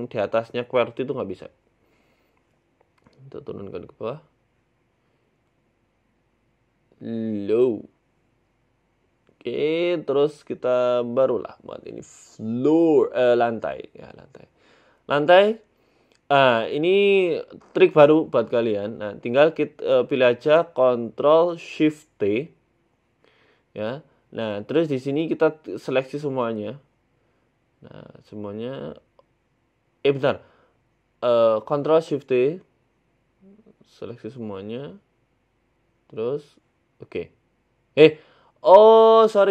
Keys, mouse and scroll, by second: 0.1 middle click, 0.3 scroll down 1, 0.4 scroll up 5, 0.6 scroll down 2, 0.7-1.1 scroll up 3, 1.1 shift+middle click, 1.5 scroll down 1, 2.2 right click, 2.2-2.5 scroll down 1, 3.3 right click, 3.8 g, 7.2 middle click, 7.5-8.0 scroll down 8, 8.0 scroll up 1, 8.0 scroll down 1, 8.8 right click, 8.8 scroll up 3, 10.7 click, 11.5 click, 12.0 click, 15.7 click.